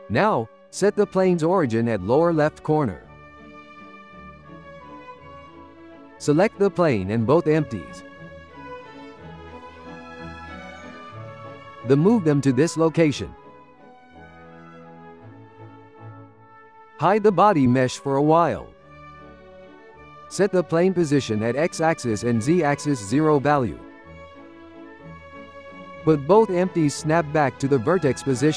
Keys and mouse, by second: 0.0 Tab, 1.3-4.2 right drag, 4.0 click, 5.1-6.3 drag, 6.8 drag, 9.0-11.3 ctrl+middle drag, 11.3 g, 14.0-16.9 ctrl+middle drag, 16.9 click, 18.2-20.6 drag, 21.4 n, 23.2-25.3 drag, 25.4 n, 26.1 g, 27.8 g.